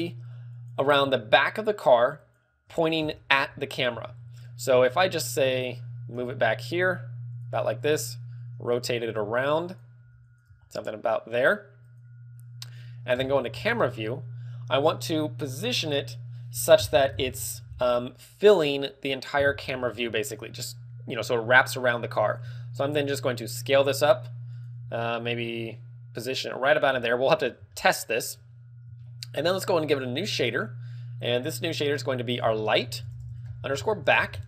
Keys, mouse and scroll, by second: 5.3 click, 5.8 scroll down 4, 6.7 g, 7.4 click, 8.3 r, 9.0 click, 9.2 g, 9.8 click, 10.0 r, 10.4 click, 10.5 g, 12.0 click, 13.2 KP_0, 14.2-14.7 scroll up 1, 14.2 KP_0, 20.3 click, 21.0-21.8 scroll down 3, 22.4 s, 22.9 s, 24.7 click, 24.8 g, 24.8 click, 24.8 g, 26.7 click, 27.0 scroll up 4, 28.3 scroll up 1, 28.3 z, 28.8 shift+middle click, 29.1 shift+middle click, 30.4 click, 31.4 click, 32.0 click, 32.3 click.